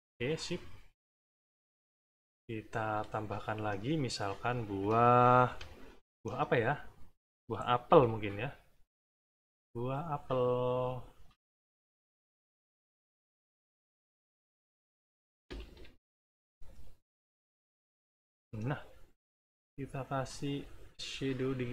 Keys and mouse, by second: 0.6 click, 3.3 middle click, 4.7 middle click, 5.4 =, 5.9 middle click, 7.9 b, 8.9 click, 9.4 click, 10.3 click, 11.6 click, 12.8 click, 13.5 click, 14.3 click, 15.6 ctrl+z, 16.0 ctrl+click, 17.3 click, 19.2 click, 19.8 click, 21.1 click.